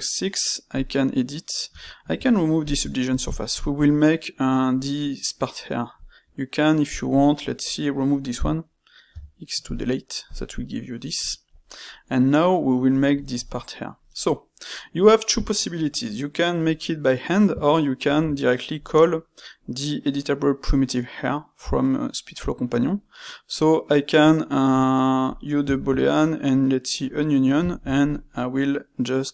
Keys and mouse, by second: 1.7 space, 3.1-5.9 ctrl+shift+middle drag, 5.9 click, 7.1 click, 9.0 x, 10.2 click, 10.5-17.3 middle drag, 18.0 shift+q, 25.7 shift+q, 27.6 shift+q.